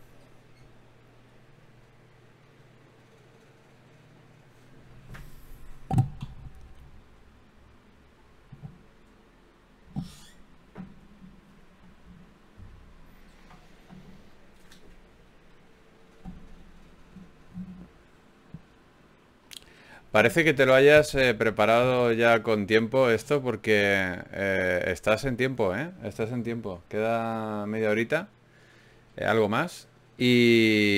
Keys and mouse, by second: 0.4 t, 5.8-8.0 drag, 11.6 click, 12.8-14.6 drag, 14.6 g, 15.9 click, 16.3 g, 16.8 g, 17.8 click, 17.8 g, 18.4 click, 19.2-20.4 drag, 20.4 f, 21.0 ctrl+Tab, 21.6-22.6 drag, 22.6 f, 22.8 f, 24.1 f, 24.9 a, 25.1 a, 25.9 ctrl+n.